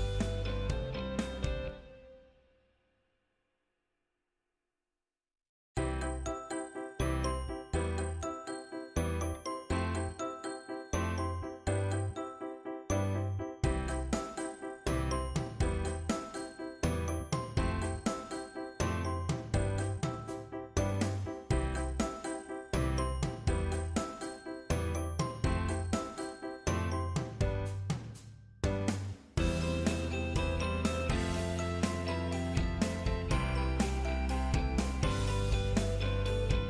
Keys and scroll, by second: 3.3 ctrl+Down.